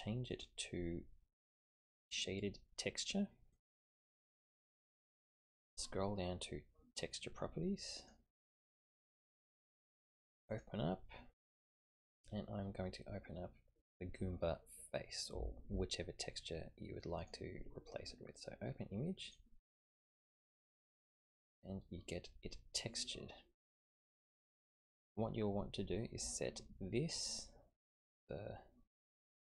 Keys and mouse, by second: 0.3-3.7 drag, 8.0 click, 10.5 click, 20.8-23.6 middle drag.